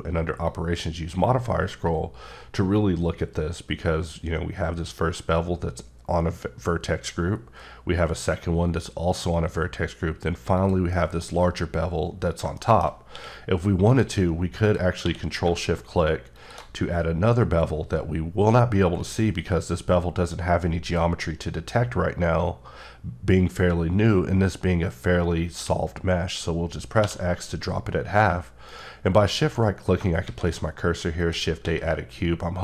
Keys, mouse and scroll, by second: 0.5 click, 2.0-2.8 scroll up 1, 7.3-8.0 scroll up 2, 9.9-10.6 scroll up 1, 10.6 click, 10.9 middle click, 11.3-12.1 scroll up 2, 12.6 shift+middle click, 13.1 q, 13.9 click, 14.7 click, 15.0 q, 16.4 shift+click, 27.0 x, 28.7 shift+right click, 30.2 shift+a, 31.2 click, 31.6 s.